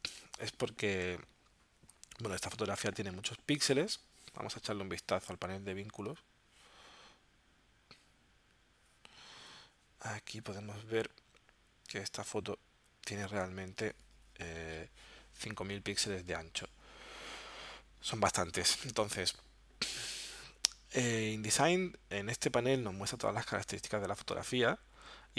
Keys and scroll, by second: 14.6 alt+super+0.